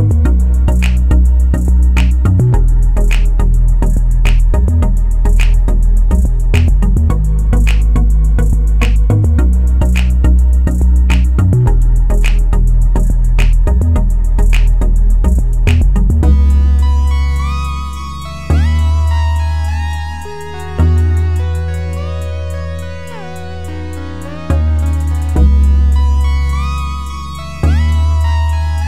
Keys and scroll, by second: 0.6 2, 0.8 Return, 28.3 2.